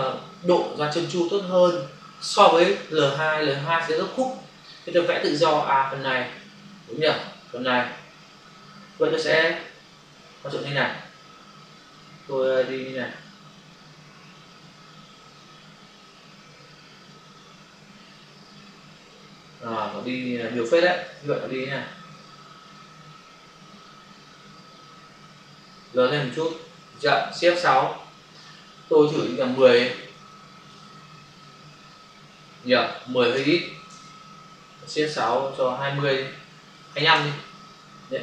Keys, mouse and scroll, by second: 12.5 click, 21.0 ctrl+d, 22.1 click, 28.2 shift+F6, 29.4-30.1 typing, 30.1 Return, 35.0 shift+F6, 36.6 2, 37.0 Return.